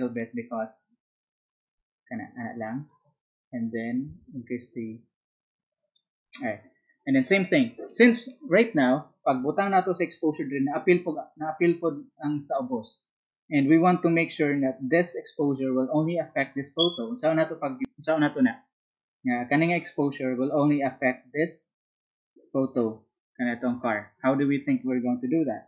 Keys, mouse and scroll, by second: 0.9-25.6 drag.